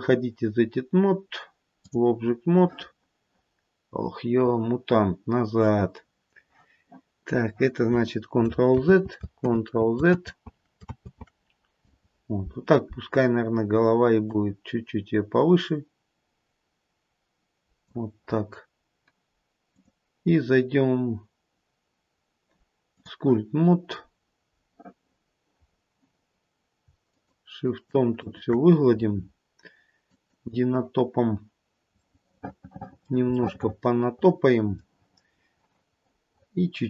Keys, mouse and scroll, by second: 9.3 ctrl+z, 10.2 ctrl+z, 10.9 ctrl+z, 11.7 ctrl+z, 14.1 click, 19.7 click, 24.1-25.6 scroll up 1, 25.6-26.8 scroll up 2, 27.1 shift+click, 27.6 shift+click, 28.2 shift+click, 30.0 click, 31.9 middle click, 32.1 middle click, 33.3 middle click, 33.9 middle click, 36.0 middle click.